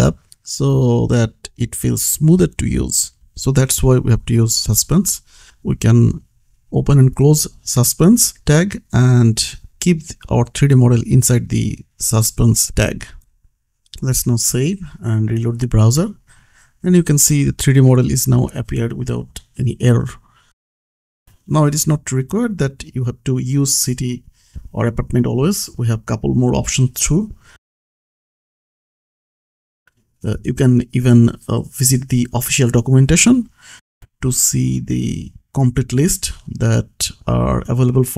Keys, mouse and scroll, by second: 3.4 click, 3.9 Return, 5.1 ctrl+v, 5.7 v, 7.5 ctrl+v, 9.5 shift+v, 11.3 Return, 11.3 Down, 11.8 alt+Up, 12.5 ctrl+s, 13.2 click, 15.4 click, 16.1-16.8 scroll up 1, 16.8 click, 17.8-18.3 scroll down 1, 18.3 click, 20.2-20.7 scroll up 1, 20.7 click, 25.3 click, 27.6 click, 28.0-30.1 scroll down 1, 30.3 click, 36.6 middle click, 37.5 click.